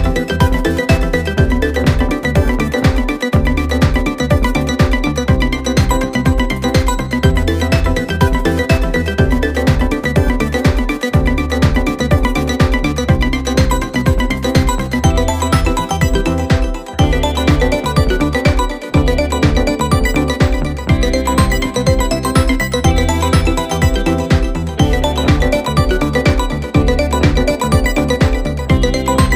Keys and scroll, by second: 1.5 ctrl+z.